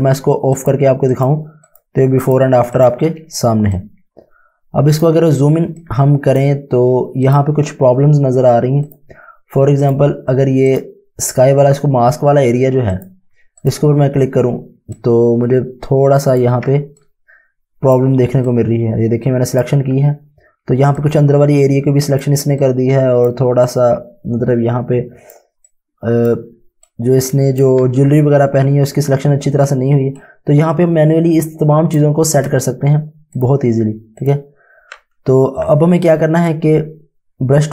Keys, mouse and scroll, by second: 3.3 space, 3.8 click, 5.9 click, 6.1 Home, 13.7 click, 14.7 space, 15.1 click, 15.2 space, 17.2 click, 17.3 space, 18.6 click, 21.1 click, 27.0 click, 29.7-31.8 typing, 30.3 click, 33.4 click, 35.7 typing, 36.5 right click.